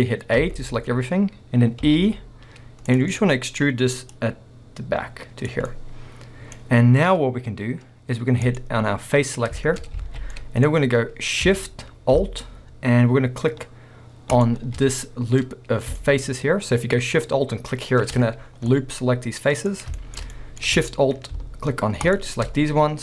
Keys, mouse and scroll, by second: 0.4 a, 1.9 e, 3.0 click, 3.1 middle click, 4.1 click, 5.7 middle click, 6.7-8.5 scroll, 8.5 click, 9.8 scroll, 10.0 alt+a, 10.3 middle click, 11.0-14.3 scroll up 2, 14.3 alt+shift+click, 15.0 middle click, 15.4-16.0 scroll up 2, 16.1-20.6 middle drag, 18.5 scroll down 1, 20.6 scroll up 2, 22.0 alt+shift+click, 22.6 scroll down 2, 22.7-23.0 middle drag.